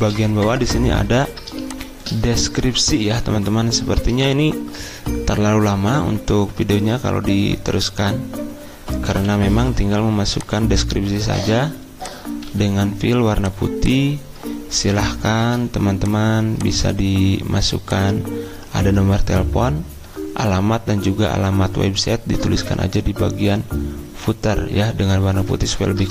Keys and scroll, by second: 9.1 t, 12.5 d, 15.4 ctrl+z.